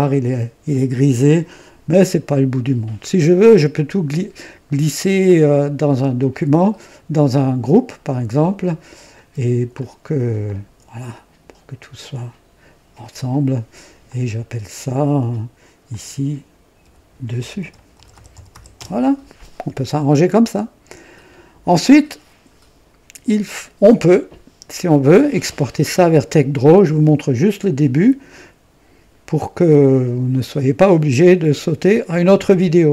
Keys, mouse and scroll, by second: 7.5 click, 8.7 scroll down 1, 9.7 click, 10.4 ctrl+click, 11.0-12.3 ctrl+drag, 14.0 click, 15.8 click, 16.8 F3, 17.0-18.9 typing.